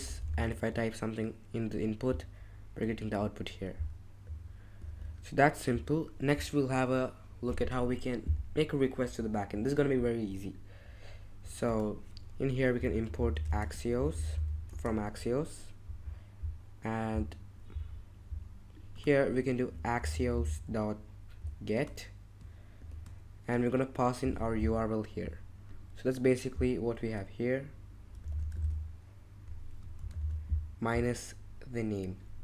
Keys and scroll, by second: 0.0-0.7 typing, 4.8 super+Tab, 12.5-14.8 typing, 18.2-22.8 typing, 24.2 super+Tab, 28.3 super+c, 28.5 super+Tab, 30.0 shift+', 30.2 super+v.